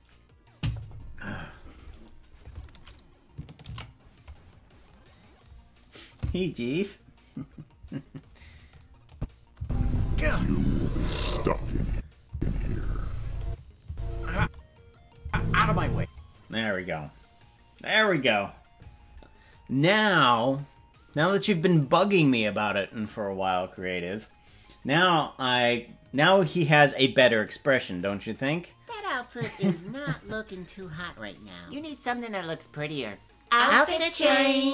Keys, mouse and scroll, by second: 6.0 ctrl+s, 9.1 click, 9.5 space, 11.9 space, 12.3 space, 13.4-15.9 typing.